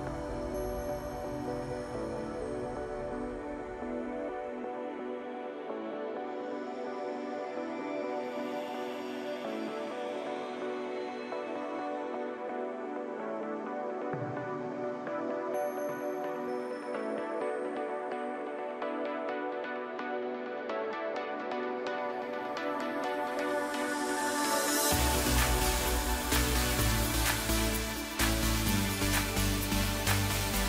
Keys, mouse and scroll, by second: 1.1 Tab, 1.5-2.9 middle drag, 2.9 drag, 3.8 click, 5.3 click, 5.7-6.4 middle drag, 6.4 scroll up 2, 7.1 KP_1, 8.2-8.8 scroll up 1, 8.8 scroll down 1, 9.1-11.8 middle drag, 11.8 Tab, 13.3 ctrl+r, 18.7 scroll down 1, 19.3 ctrl+KP_1, 20.1-21.3 scroll up 1, 21.3 ctrl+r, 25.3 Tab, 25.7 scroll down 3, 25.9-27.3 middle drag, 27.3 scroll up 1, 27.5 scroll down 3, 27.7-28.8 middle drag, 28.8 KP_1, 29.6-30.6 scroll up 3.